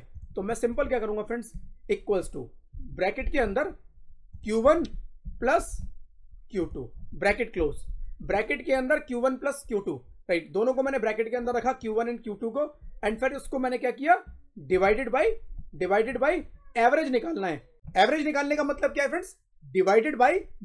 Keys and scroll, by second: 1.4 =, 2.6 shift+9, 5.1 shift+=, 7.5 shift+0, 14.6 /.